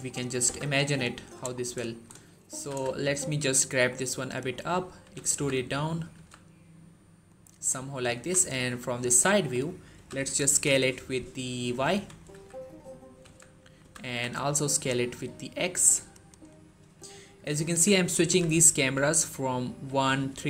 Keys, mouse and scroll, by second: 0.3 z, 0.8-1.4 click, 1.4 scroll up 1, 1.8 shift+middle click, 2.4 g, 2.7 z, 4.2 click, 4.9 e, 5.1 z, 6.0 z, 7.1 click, 8.0 3, 8.9-9.8 shift+scroll down 2, 9.8-10.3 typing, 11.5 click, 11.8-13.9 typing, 15.9 click, 17.5-18.6 typing, 19.7-20.2 typing.